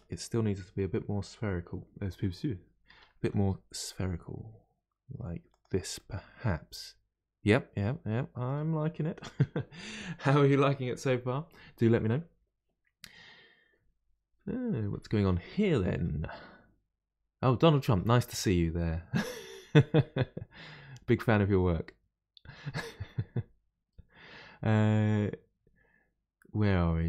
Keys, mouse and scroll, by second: 2.9 g, 5.9-8.9 middle drag.